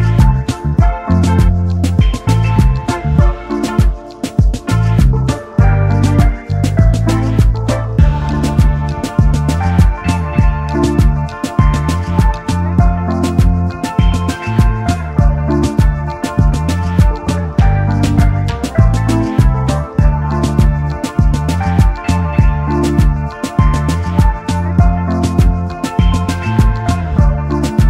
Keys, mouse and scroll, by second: 1.0-1.8 typing, 5.6 ctrl+f, 6.9 double click, 7.4 alt+scroll down 1, 8.1 alt+scroll up 1, 19.4 typing, 20.4 Return, 21.8 alt+scroll down 1, 22.8 space, 26.0 typing, 27.4 typing.